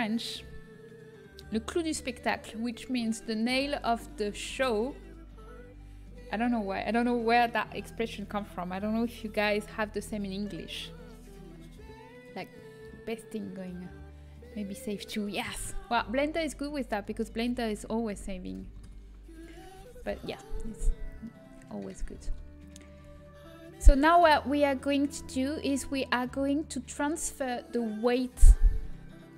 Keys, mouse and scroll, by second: 18.9 ctrl+s, 22.4 Tab, 22.4 a, 26.1-29.0 drag.